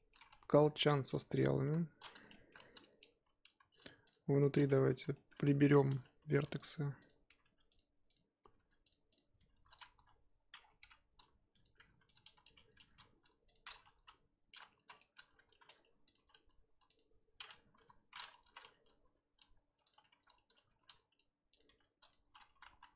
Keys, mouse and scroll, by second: 0.2-0.7 scroll up 1, 0.7-1.6 scroll up 5, 1.1 click, 1.6 KP_7, 1.8-2.3 scroll up 4, 2.3-3.1 shift+middle drag, 3.1 g, 4.0 click, 4.4 shift+middle drag, 4.6-5.1 scroll up 2, 4.7 Tab, 5.1-5.5 shift+middle drag, 5.5 1, 5.8 click, 6.3 g, 7.1 click, 7.3 g, 8.1 click, 8.5 g, 9.1 click, 9.4 g, 9.9 a, 10.5 scroll down 3, 10.8 m, 11.8 Tab, 12.0 click, 12.8 shift+d, 13.9 KP_1, 14.8 z, 15.0-15.5 shift+middle drag, 15.5 r, 16.1 g, 17.7-22.5 typing.